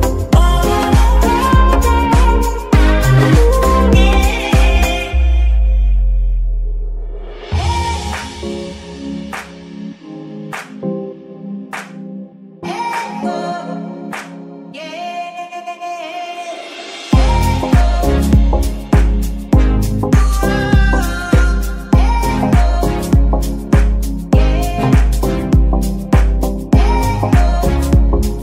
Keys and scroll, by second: 0.5 Escape, 0.9 g, 2.0 Escape, 7.0 KP_1, 7.2 KP_0, 7.6 KP_0, 7.9 Return, 13.5 KP_0, 13.5 KP_Decimal, 13.6 KP_5, 13.7 Return, 16.3 KP_Subtract, 17.0 KP_0, 17.1 KP_Decimal, 17.3 KP_5, 17.6 Return, 21.6 KP_Subtract, 22.2 Return, 22.2 KP_1, 25.8 KP_Subtract, 26.0 KP_0, 26.1 KP_Decimal, 26.3 KP_5, 26.4 Return.